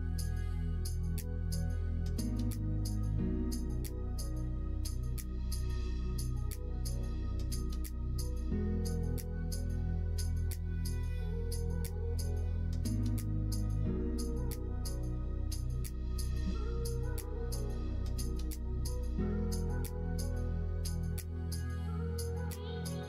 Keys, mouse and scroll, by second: 0.6-3.2 drag, 3.4 middle click, 4.0 middle click, 5.8 click, 7.4 e, 9.5 middle click, 10.3 middle click, 12.1 click, 13.1 shift+r, 13.6 middle click, 15.6 ctrl+z, 15.9 ctrl+z, 16.3 ctrl+z, 16.6 middle click, 18.1 click, 18.7 middle click, 20.8 alt+e.